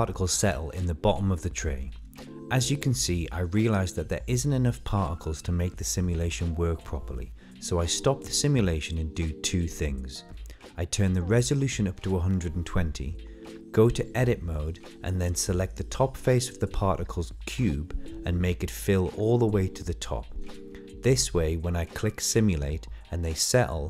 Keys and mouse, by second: 1.6 click, 2.6 click, 2.9 middle click, 3.3-4.4 middle drag, 4.6 shift+middle click, 4.9 middle click, 5.7 click, 6.7-8.2 middle drag, 8.8-9.8 middle drag, 10.5 click, 11.0 Tab, 11.7 click, 13.0 Tab, 13.7-14.2 middle drag, 14.4 shift+middle click, 14.6 middle click, 15.2 click.